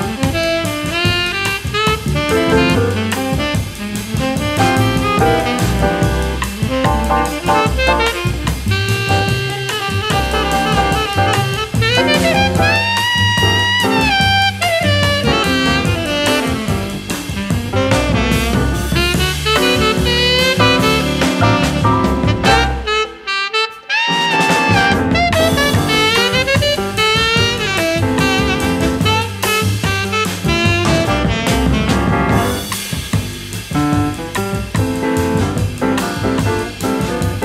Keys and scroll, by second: 1.0 space, 3.5 super+z, 6.0 space, 7.2 a, 17.3 -, 19.3 a, 27.6 -.